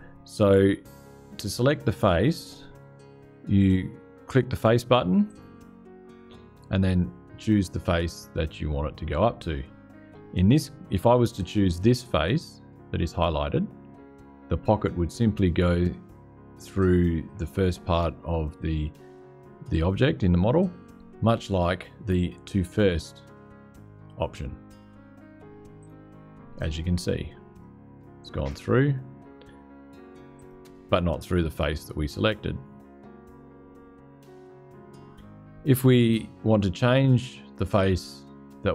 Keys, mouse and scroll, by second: 5.0 click, 25.5 click, 27.3-28.9 drag, 30.1 click.